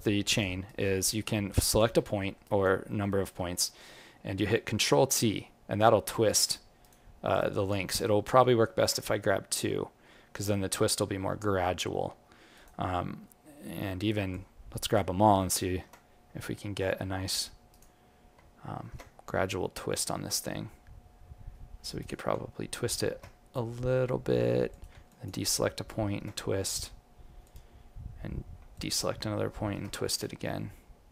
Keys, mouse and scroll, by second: 0.2 click, 0.6 right click, 1.6 click, 2.2 alt+middle click, 2.4 alt+right click, 2.8 alt+middle click, 3.9 ctrl+t, 8.4 click, 8.7 ctrl+t, 15.7 ctrl+t, 23.2 ctrl+t, 25.1 ctrl+click, 26.0 ctrl+t, 28.7 ctrl+click, 29.6 ctrl+t.